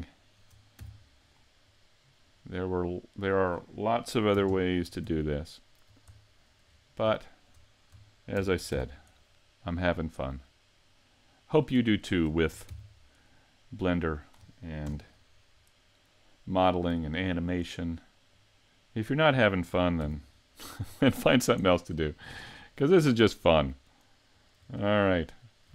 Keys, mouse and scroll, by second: 0.2 shift+right click, 0.8 x, 2.3 right click, 2.8 middle click, 4.5 ctrl+KP_3, 5.4 shift+middle click, 6.1-6.7 scroll down 4, 6.7-7.2 scroll up 3, 7.2 shift+middle click, 8.4 shift+d, 11.7 click, 11.9 shift+middle click, 12.7 shift+d, 14.3 click, 14.9 KP_Decimal, 16.5 click, 18.3 click, 19.4-20.0 scroll down 2, 20.0-20.3 scroll down 2, 20.0 z, 20.3 middle click, 21.0 shift+middle click, 21.6 scroll down 2, 22.0 shift+middle click, 24.3 shift+right click, 25.0 shift+middle click.